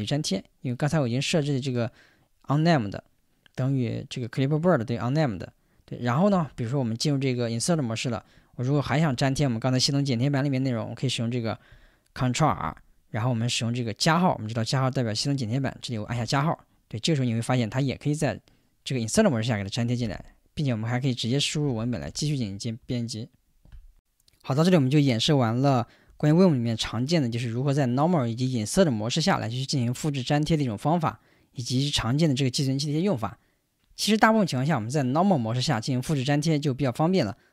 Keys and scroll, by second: 6.3 o, 7.6 Return, 12.5 ctrl+r, 20.0 f, 21.4-22.8 typing.